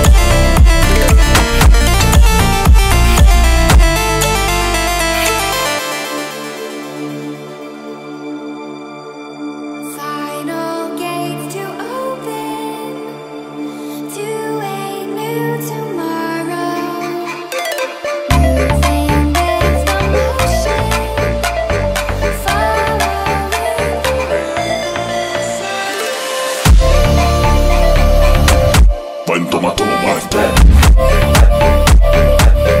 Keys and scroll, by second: 7.6 Return, 10.3 Return, 13.0 0, 13.2 1, 27.8 Return, 29.1 0, 29.5 2, 29.6 Return, 29.8 0, 30.3 Return, 30.7 0, 31.5 Return, 31.7-32.8 typing.